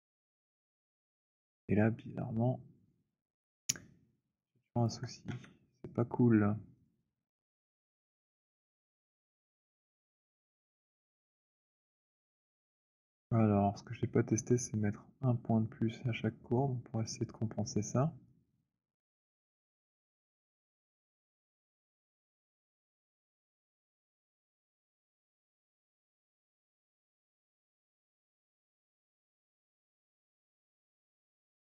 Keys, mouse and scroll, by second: 1.2 click, 4.9 alt+click, 5.1-6.7 scroll, 5.1 w, 6.7 click, 8.7 right click, 9.5-9.9 scroll, 12.6 alt+click, 19.1 right click, 20.5 click, 22.6 click, 22.9 shift+right click, 24.9 click, 26.8 right click, 28.6 click, 30.6 shift+right click.